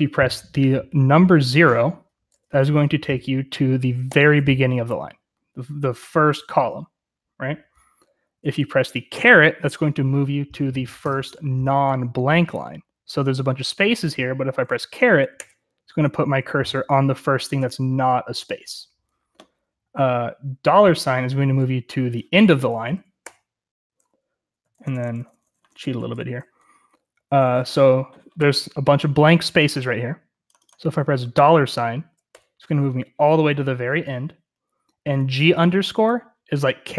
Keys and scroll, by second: 4.0 0, 15.3 shift+6, 23.2 shift+4, 24.6-27.6 typing, 25.7 Escape, 32.2 shift+4.